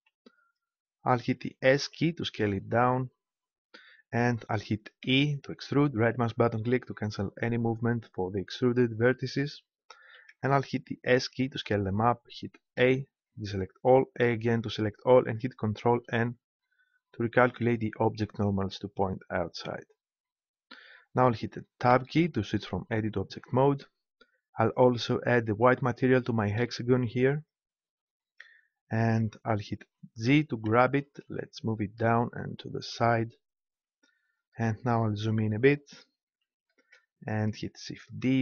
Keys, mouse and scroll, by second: 1.9-3.7 drag, 5.0 e, 10.0 s, 11.6-13.1 drag, 12.7 a, 14.1 a, 15.9 ctrl+n, 21.9 Tab, 24.5-27.8 drag, 30.2 g, 33.1-34.9 drag, 36.0 z, 38.2 shift+d.